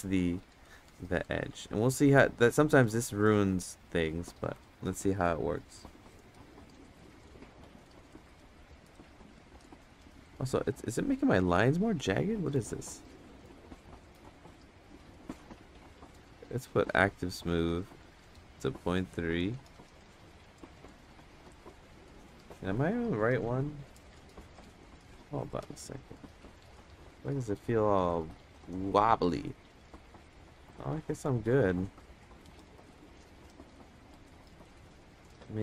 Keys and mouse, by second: 0.5 ctrl+z, 1.6 ctrl+z, 1.8 click, 2.9 ctrl+z, 4.5 ctrl+z, 5.9-7.2 drag, 7.8 ctrl+z, 8.1-9.2 drag, 10.5 ctrl+z, 12.6-18.8 drag, 19.4 click, 21.1 ctrl+z, 21.8 click, 22.7 ctrl+z, 23.2 click, 27.2 middle click, 28.1 click, 28.9-31.8 drag, 33.7 middle click, 35.2 click.